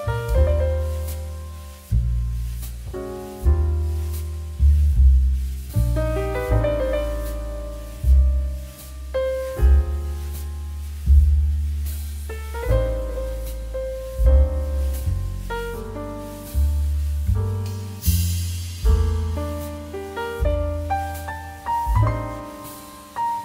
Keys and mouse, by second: 0.1 i, 1.4 click, 1.7 middle click, 2.2 middle click, 2.6 shift+middle click, 2.8 middle click, 3.4 click, 4.9 click, 5.6 shift+middle click, 6.2 click, 6.4 ctrl+click, 7.0 ctrl+z, 7.3 ctrl+click, 12.0 middle click, 12.2 shift+middle click, 12.9 e, 15.3 click, 15.5 middle click, 15.8 shift+middle click, 16.3 shift+middle click, 16.7 shift+a, 18.2 click, 18.5 middle click, 18.6 s, 19.4 click, 19.7 middle click, 19.9 shift+middle click, 20.3 middle click, 20.8 Tab, 21.0 click, 21.3 3, 21.5 click, 21.7 e, 22.2 click, 22.9 e, 23.3 click.